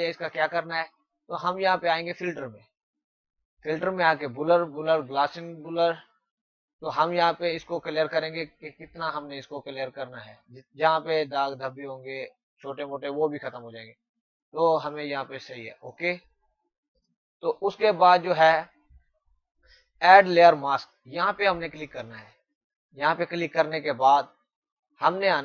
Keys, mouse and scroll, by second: 1.8 click, 5.6 click, 8.6 click, 22.1 click.